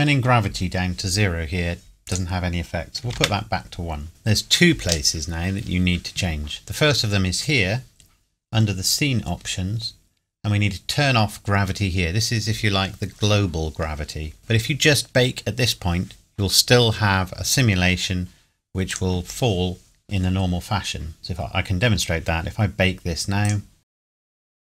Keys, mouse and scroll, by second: 2.1 click, 3.0 KP_1, 3.2 KP_Enter, 4.1-4.4 scroll up 2, 6.6 click, 14.4 click, 19.0 click, 21.3-22.3 scroll up 1, 23.4 click, 24.1 click, 24.4 click.